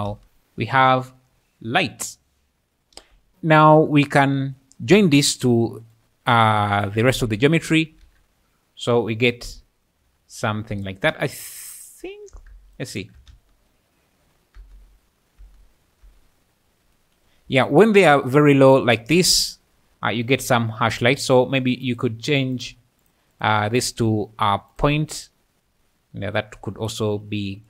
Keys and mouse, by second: 0.1 space, 0.3 `, 0.8 `, 2.9 space, 4.9 click, 7.1 ctrl+shift+click, 8.0 alt+a, 10.3 `, 12.8 shift+click, 13.3 space, 14.6 space, 15.4 space, 16.1 space, 19.7 `, 23.3 click, 24.7 click.